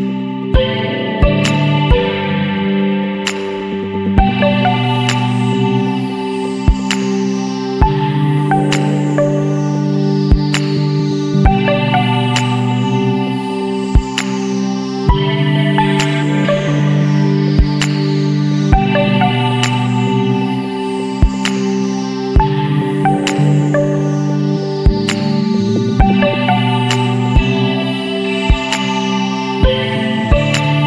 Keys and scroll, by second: 4.7 ctrl+-, 6.5 Return, 9.4 Down, 9.8 Down, 11.6 Down, 12.6 Up, 13.0 ctrl+t, 14.4 Return, 29.5 space, 29.7 [, 30.8 ].